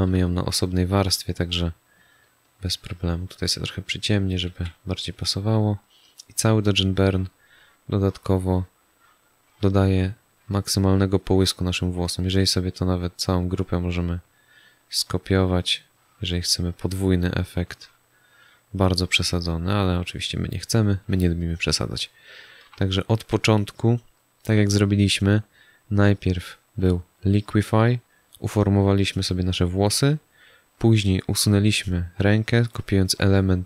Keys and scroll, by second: 4.4 z.